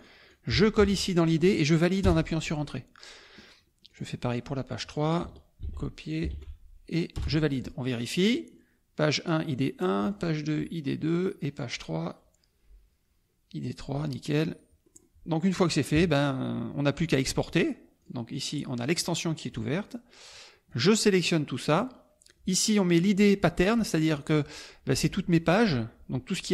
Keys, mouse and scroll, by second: 0.0-0.7 ctrl+drag, 0.7 ctrl+v, 2.0 Return, 3.9 click, 4.7 click, 5.6 ctrl+c, 6.0 ctrl+click, 6.4 ctrl+v, 7.1 Return, 8.2 click, 10.1 click, 11.1 click, 14.9 middle click, 15.9 KP_Subtract, 16.9 middle click, 18.0-19.1 drag, 19.5 middle click, 20.6-21.9 drag.